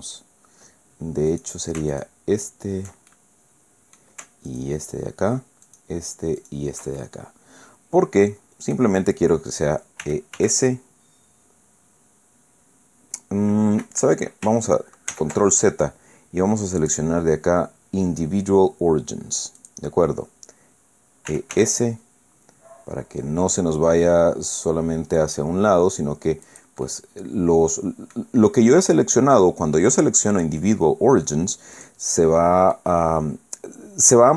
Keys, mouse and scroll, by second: 1.3 click, 1.9 alt+shift+right click, 3.1-4.2 alt+shift+middle drag, 4.5 alt+shift+right click, 5.6 alt+shift+right click, 6.4 alt+shift+right click, 7.0-9.0 alt+shift+middle drag, 10.0 e, 10.4 s, 13.8 Escape, 15.1 ctrl+z, 16.8 click, 19.6 click, 21.3 e, 21.5 s, 26.4 click, 26.8-28.4 drag, 28.8 click, 30.4 click, 31.8 click, 32.8-34.3 drag.